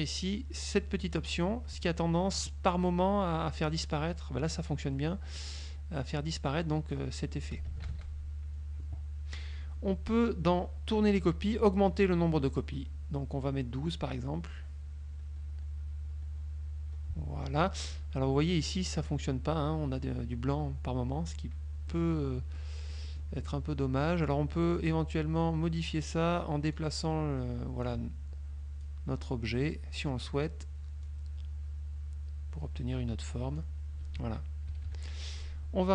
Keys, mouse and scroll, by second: 1.1 click, 5.0 click, 7.0 click, 8.0 ctrl+z, 13.0 scroll up 2, 13.6 scroll up 2, 14.2 scroll up 2, 15.3-15.9 scroll up 4, 16.3 scroll up 2, 22.0 click, 22.6 click, 24.8-28.2 drag, 29.0-30.3 drag, 31.2-33.9 drag, 34.8 KP_Subtract.